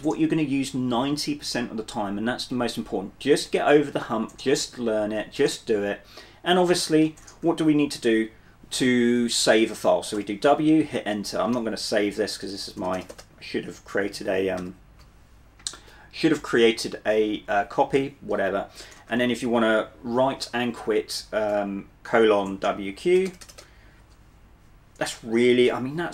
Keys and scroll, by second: 7.5 typing, 10.4 w, 13.0 BackSpace, 13.2 BackSpace, 14.7 q, 18.8-20.2 typing, 23.2 BackSpace, 23.4 BackSpace, 23.6 BackSpace.